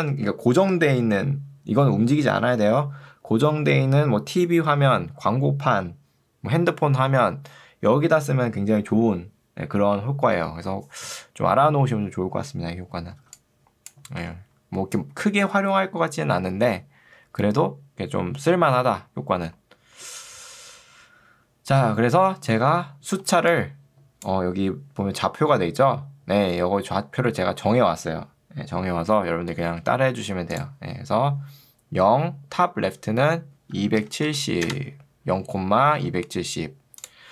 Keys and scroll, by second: 13.3 ctrl+2, 14.3 Escape, 23.3 ctrl+2, 26.5 Escape, 34.3 0, 34.7 Return.